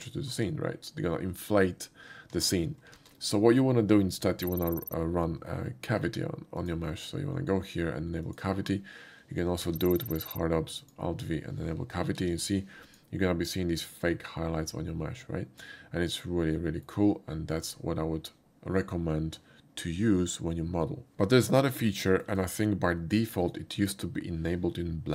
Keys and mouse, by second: 6.6 click, 8.3 click, 9.8 alt+v, 10.9 click, 12.2 alt+v, 12.9 click, 16.1-16.9 shift+middle drag, 22.0 shift+middle click, 23.6 shift+middle drag.